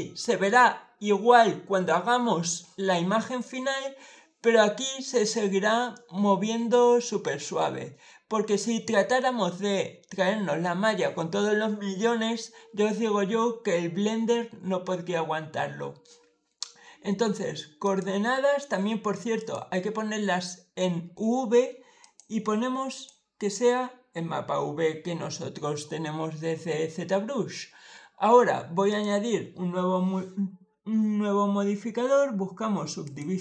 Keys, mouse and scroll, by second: 5.8-7.1 middle drag, 17.7 click, 19.2 click, 21.9 click, 22.8 click, 28.8 click, 32.9 click.